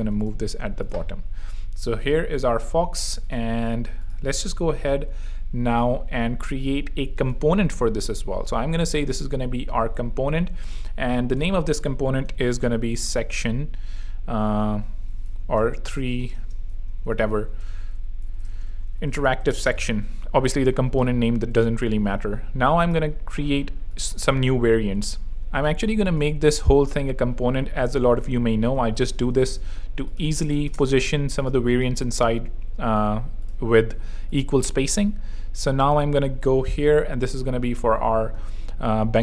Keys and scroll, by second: 1.1 Escape, 7.1 alt+super+k, 8.5 super+r, 12.1-13.8 typing, 15.4 super+Left, 15.7 shift+super+t, 15.9-19.9 typing, 25.9 shift+a, 29.2 super+5, 29.3 0, 29.4 Return, 30.4 super+5, 30.5 0, 30.6 Return, 32.1 super+d, 36.5 shift+super+p, 38.2 Return.